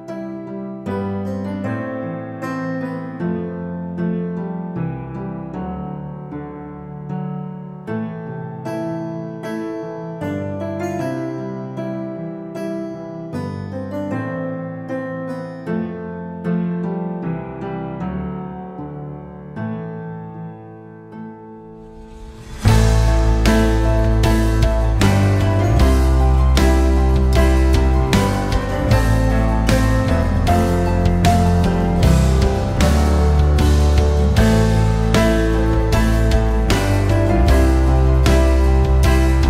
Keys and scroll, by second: 1.0 space, 3.1 alt+w, 9.0 r, 12.4 w, 15.6 w, 19.5 alt+w, 24.7 F4, 28.9 3, 29.2 0, 30.2 Return, 33.1 F4.